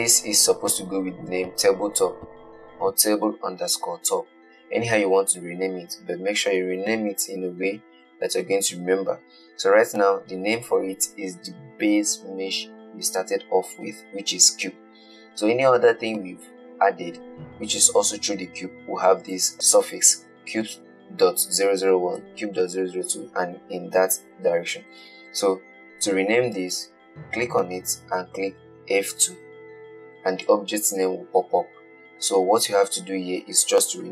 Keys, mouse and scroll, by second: 29.1 F2.